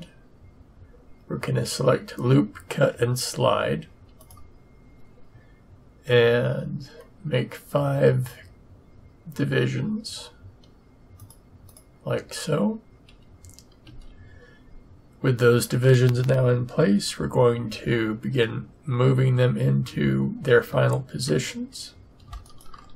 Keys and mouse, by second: 4.2-6.0 drag, 13.8 a.